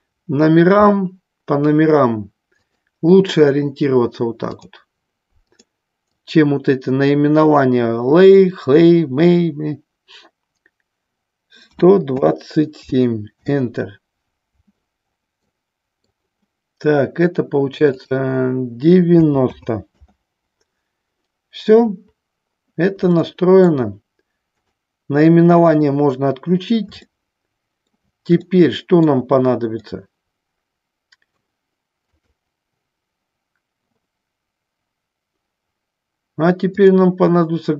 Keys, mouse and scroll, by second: 2.7-4.9 drag, 5.7-14.8 drag, 15.6 middle click, 18.1-20.6 drag, 23.3 shift+middle click, 24.8 click, 27.4 shift+middle click, 28.6 shift+middle click, 30.0-31.5 middle drag, 36.9-37.7 drag.